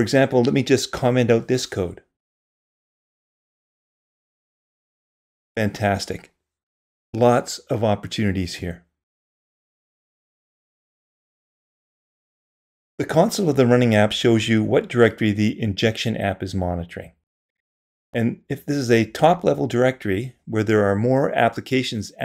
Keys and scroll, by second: 2.7 super+/, 7.5 super+/.